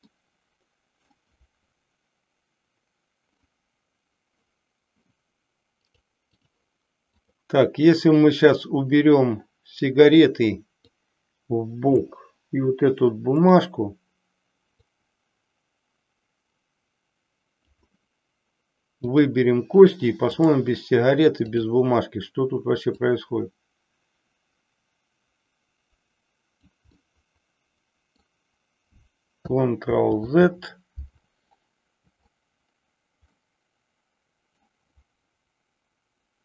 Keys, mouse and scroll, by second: 0.1-1.2 middle drag, 5.7 click, 7.0 click, 10.9-12.2 drag, 13.4 click, 14.7-17.8 drag, 19.1 click, 20.3-21.6 drag, 23.1-26.7 drag, 27.0-28.2 middle drag, 29.8 ctrl+z, 33.4-34.7 middle drag.